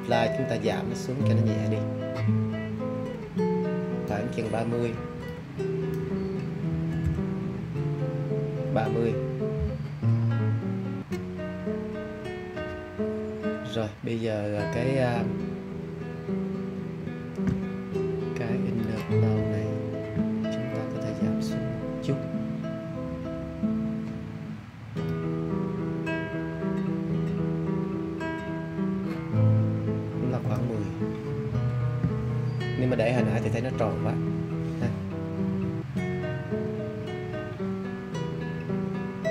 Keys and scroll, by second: 6.6 3, 7.0 0.